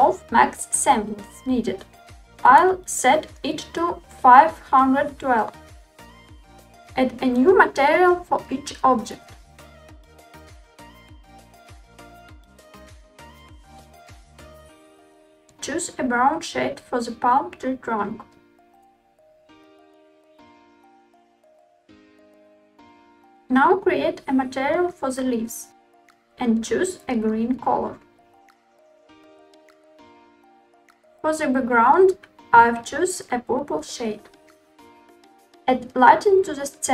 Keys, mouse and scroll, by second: 6.5 Tab, 10.2 click, 11.5 click, 12.5 click, 13.5 click, 15.3 click, 19.8 4, 20.8-21.4 scroll up 3, 21.9 scroll up 1, 22.8 click, 24.4 click, 25.6 click, 26.3 click, 28.6 d, 31.0 click, 32.4 click, 35.5 shift+a.